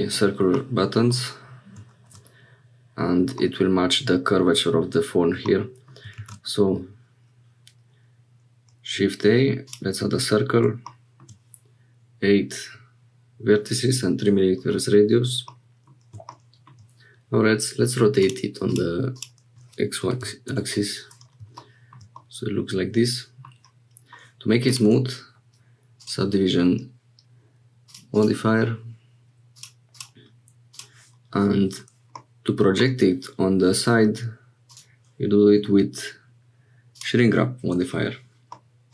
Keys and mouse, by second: 0.0 middle click, 0.6 middle click, 3.4-4.6 middle drag, 5.5 middle click, 6.1 shift+a, 15.5 middle click, 18.2 click, 19.2-20.9 drag, 22.2-23.5 drag, 24.6-26.0 drag, 27.8 click, 28.1 click, 30.0 click, 32.2 middle click, 34.8-37.0 drag, 38.5 click.